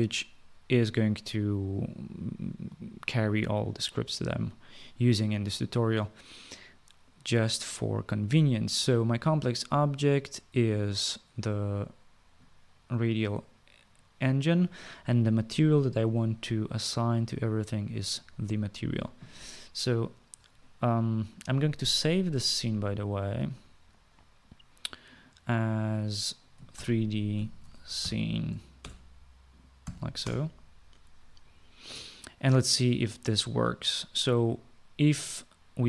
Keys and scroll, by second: 26.4-28.9 typing, 29.9 n, 30.3 Return.